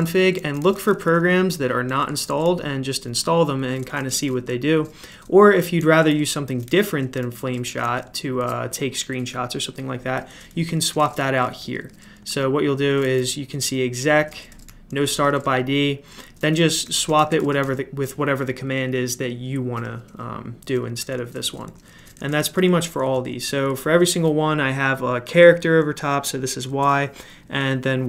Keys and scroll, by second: 0.0-8.0 typing, 10.0-18.0 typing, 20.7-23.8 typing, 26.7 j.